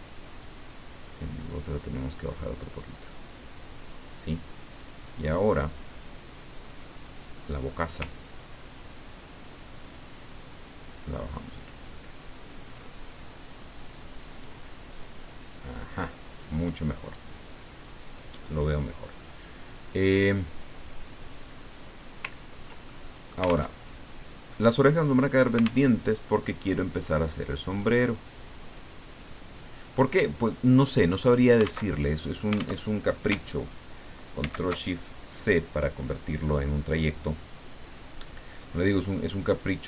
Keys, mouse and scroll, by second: 4.8 click, 5.5-7.3 drag, 8.2-11.7 ctrl+drag, 12.0 ctrl+scroll down 2, 14.3 click, 21.9-22.7 scroll down 4, 23.0 ctrl+middle click, 23.2 click, 23.7 alt+Tab, 25.9 alt+Tab, 27.7 click, 28.7-31.8 drag, 31.8 alt+Tab, 32.8 alt+Tab, 34.4 ctrl+shift+c, 39.6 click.